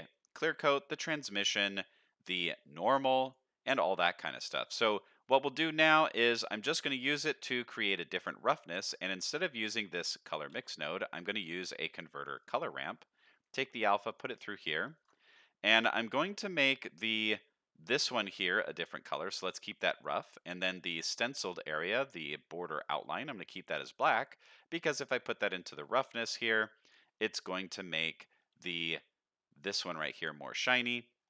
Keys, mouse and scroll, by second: 1.4 middle click, 2.5-3.1 drag, 3.6-4.8 middle drag, 5.0 middle click, 5.7-6.2 drag, 6.4 middle click, 7.2 middle click, 8.3 click, 8.3 middle click, 8.7 shift+a, 10.6 shift+a, 13.5-14.2 drag, 14.4 middle click, 15.0 ctrl+shift+click, 15.8 drag, 16.5-17.2 drag, 19.2-20.0 drag, 20.5-21.0 drag, 22.9 middle click, 23.9-25.3 drag, 25.5 middle click, 26.1 ctrl+shift+click, 27.3 shift+middle click, 27.8 middle click, 28.3-28.6 scroll up 2, 28.6 shift+middle drag, 31.1-31.2 scroll down 2.